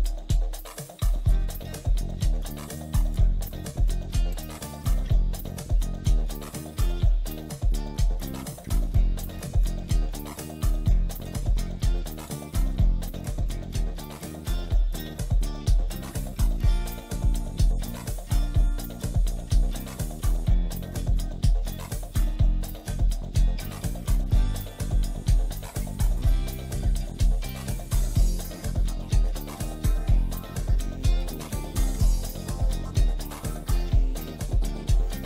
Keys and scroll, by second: 0.5 ctrl+r, 5.1 shift+Page_Down, 5.4 ctrl+Page_Up, 11.0 F4, 11.4 Escape, 14.1 Escape, 18.4 F4, 24.3 shift+F2, 24.6 F3, 25.8 F4, 27.0 ctrl+r, 27.4 Escape, 27.7 F2, 29.6 ctrl+g, 30.8 F3.